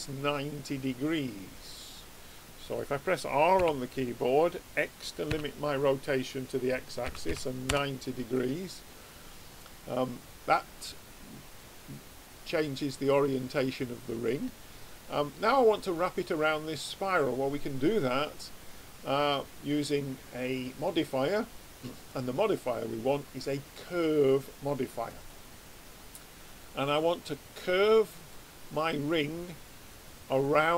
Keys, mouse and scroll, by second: 3.6 r, 8.3-9.9 middle drag, 20.8-24.0 drag, 28.3-30.7 middle drag, 29.8 click.